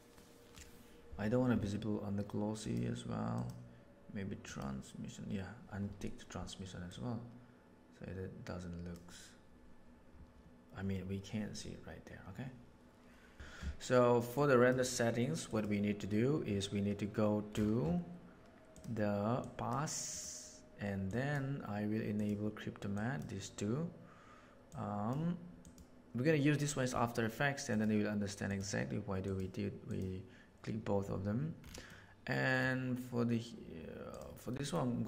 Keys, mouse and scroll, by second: 2.6 click, 3.3 click, 4.4 click, 6.9-8.9 drag, 14.4 middle drag, 15.4 click, 18.7 click, 19.4 drag, 20.1 click, 21.1 drag, 22.1 click, 22.9 click, 24.6-25.1 drag, 25.6 click, 27.7 click, 28.4 click, 29.3 click, 29.8 click, 31.9 middle click, 34.7 middle drag.